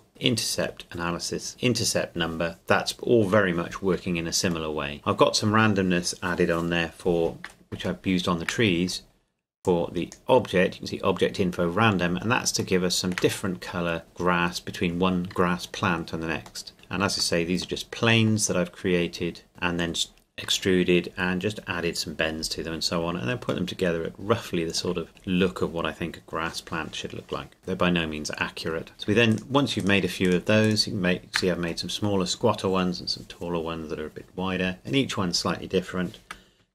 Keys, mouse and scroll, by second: 4.4 click, 4.7 shift+middle click, 7.4-7.7 scroll up 1, 8.0 shift+middle click, 8.7-9.6 scroll up 1, 9.6 click, 12.8-14.0 shift+middle drag, 14.0-15.9 scroll up 2, 16.6 middle click, 17.1-17.8 scroll up 2, 17.8-19.5 middle drag, 19.5-20.1 scroll up 2, 23.7 middle click, 25.0-26.4 scroll down 1, 27.6 shift+middle click, 28.9 right click, 29.3 shift+right click.